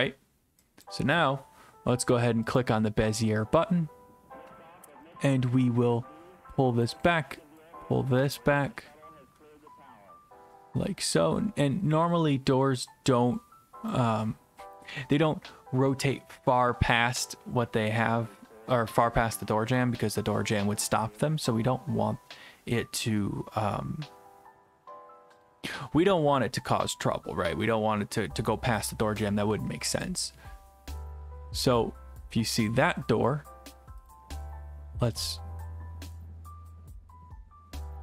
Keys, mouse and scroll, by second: 0.8 click, 2.6 click, 3.2 click, 6.8 click, 13.9 click, 30.1 click, 34.1 click, 35.2 click.